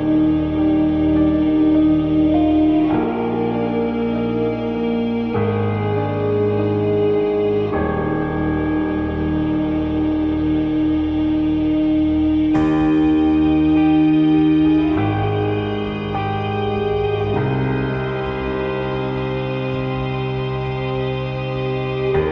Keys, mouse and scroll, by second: 6.5 click, 7.6-13.8 drag, 14.6-22.3 drag.